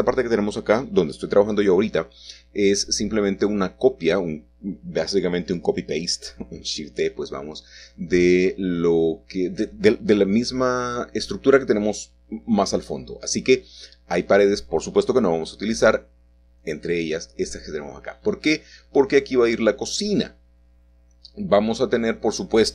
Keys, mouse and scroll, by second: 0.1-9.8 drag, 10.1 Escape, 11.6-12.7 drag, 13.2 c, 13.5-17.6 drag, 17.7 x, 18.3 click, 19.4-21.0 middle drag, 21.9-22.7 middle drag.